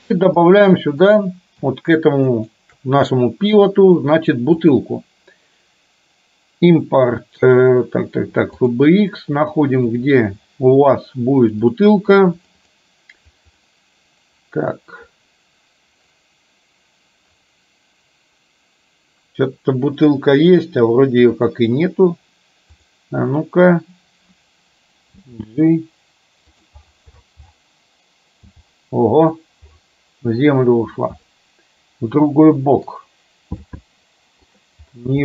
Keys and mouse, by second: 0.4 shift+middle click, 4.7-8.9 drag, 25.2 g, 28.5 g, 31.4-32.9 middle drag, 33.7 g.